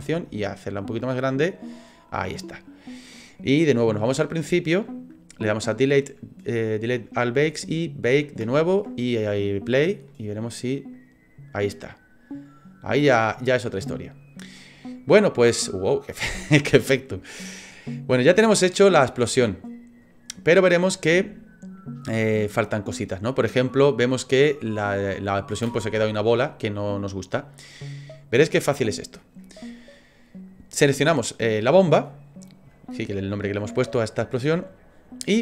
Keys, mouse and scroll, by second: 1.6 click, 4.1 click, 7.6 click, 9.6 click, 10.1 middle click, 16.9 click, 17.5 click, 20.3 middle click, 20.9 space, 25.7 space, 26.9 click.